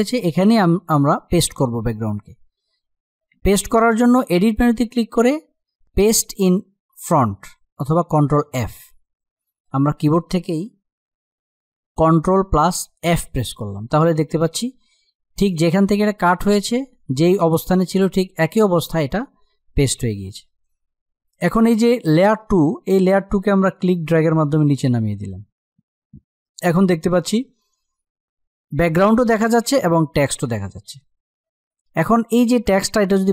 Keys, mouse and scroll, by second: 3.9 click, 9.0 click, 12.8 ctrl+f, 23.4-27.0 drag, 31.8 click.